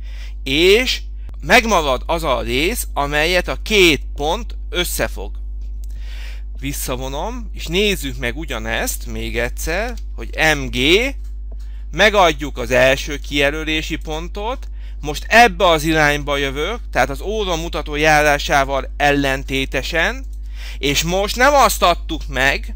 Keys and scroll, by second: 9.6 m, 10.8 Return.